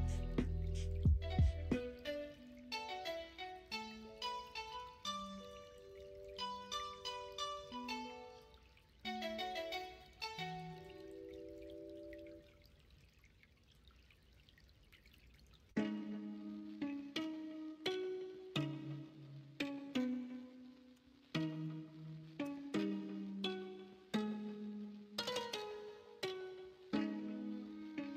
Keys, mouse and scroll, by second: 1.2 s, 5.8 middle click, 6.8 Tab, 9.9-12.7 drag, 12.7 middle click, 23.5 middle drag, 23.9 alt+z, 24.2-24.8 middle drag, 25.2-25.9 middle drag, 26.8 middle click.